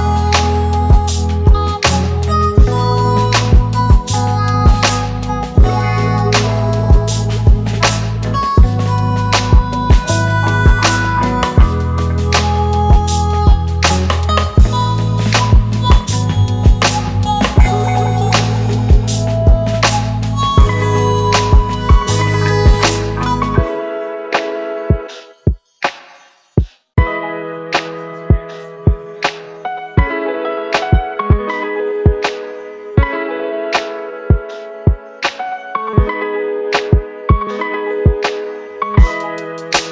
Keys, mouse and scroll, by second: 3.4 ctrl+t, 4.8 alt+shift+click, 9.6 Return, 33.1-33.7 typing, 36.2 double click.